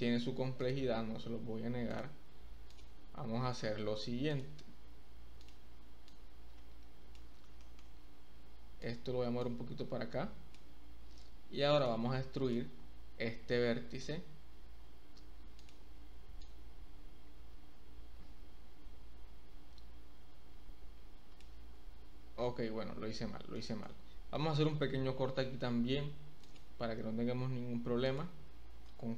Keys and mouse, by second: 0.5-1.2 typing, 0.6 click, 1.9 click, 2.4-3.1 typing, 2.6 click, 4.3 click, 6.0-7.1 drag, 7.7 shift+middle click, 8.8 click, 9.3-10.5 drag, 12.5 click, 14.0 e, 15.6 click, 16.5-21.4 drag, 21.7 ctrl+z, 22.2 ctrl+z, 23.5 shift+click, 25.0 k.